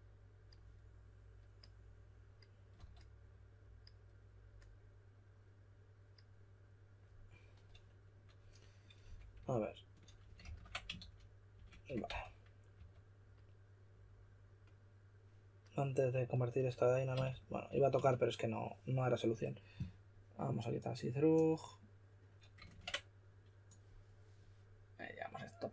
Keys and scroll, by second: 2.7 typing, 9.0 typing, 10.4 super+a, 10.9-12.7 typing, 17.0-18.1 typing, 22.7 super+Tab.